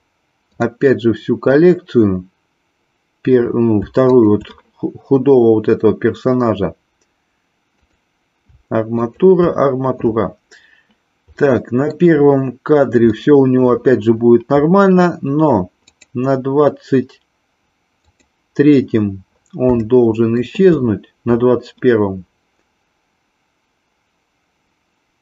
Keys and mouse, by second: 0.4 click, 4.2 shift+click, 7.8 click, 11.3 middle click, 13.2 middle click, 15.8 click, 18.1 click, 19.8 shift+middle click.